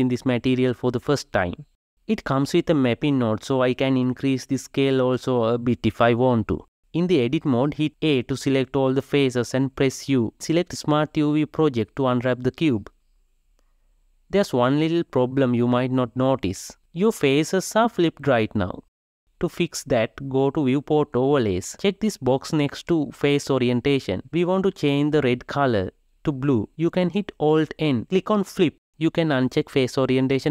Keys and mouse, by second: 4.2 click, 6.6-8.2 ctrl+middle drag, 8.2 a, 23.4-29.7 drag.